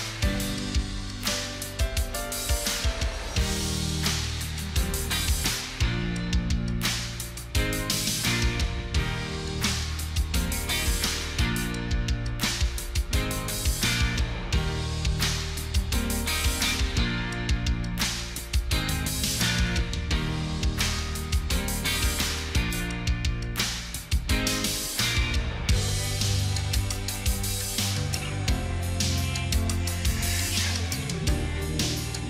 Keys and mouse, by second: 0.4 ctrl+click, 2.2 ctrl+t, 18.6-19.3 typing, 20.5 2, 20.9 1, 21.1 2, 21.2 1, 24.1 typing, 25.5-29.5 typing, 31.3 ctrl+click.